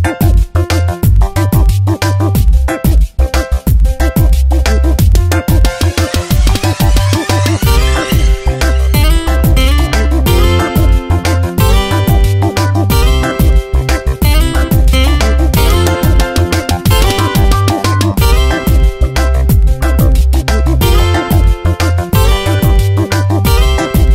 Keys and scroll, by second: 0.5 ctrl+x, 1.0 v, 1.7 ctrl+v, 2.3 Tab, 2.5 space, 9.2 Delete, 12.0 ctrl+t, 13.8 Return, 17.6 ctrl+t, 19.8 Return, 20.1 Tab.